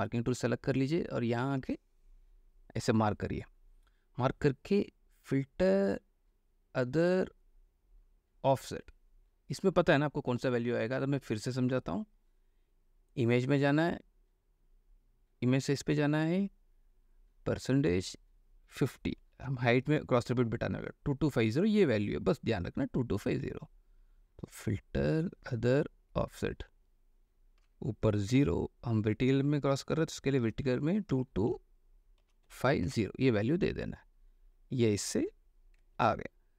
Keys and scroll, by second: 19.6 KP_5, 19.9 KP_0, 28.6 KP_0, 30.6 KP_2, 32.6-33.1 typing, 36.1 ctrl+d.